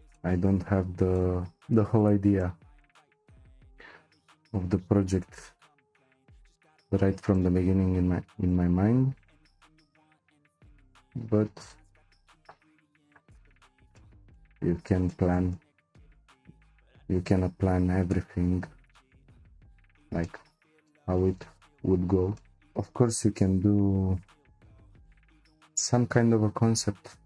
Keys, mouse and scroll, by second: 0.1-0.8 shift+middle drag, 0.8-1.1 scroll down 1, 1.1-4.4 shift+middle drag, 4.4-5.0 scroll up 1, 5.0-5.5 scroll up 1, 5.5 c, 13.6-14.0 scroll down 3, 14.0-17.6 shift+middle drag, 17.6-18.1 scroll up 2, 18.1-23.4 middle drag, 23.4 c.